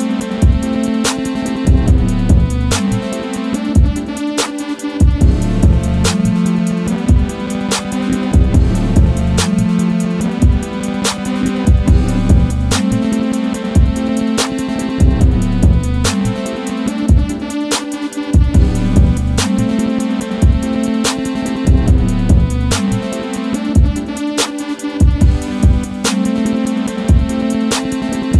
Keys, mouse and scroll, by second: 6.6 ctrl+v, 7.3 click, 9.6 click, 11.8 right click, 13.9 click, 14.4 ctrl+v, 15.3 scroll down 1, 17.1 scroll up 1, 18.6 right click, 19.0 click, 19.5 right click, 20.3 click, 21.0 right click, 21.9-28.3 drag.